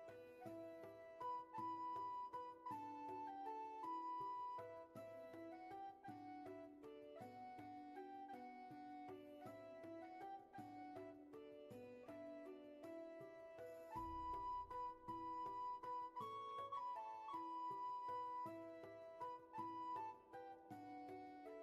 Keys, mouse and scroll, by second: 1.4-3.0 scroll down 1, 4.7-5.1 scroll up 1, 8.9-10.6 scroll up 1, 14.1 ctrl+z, 21.5 ctrl+z.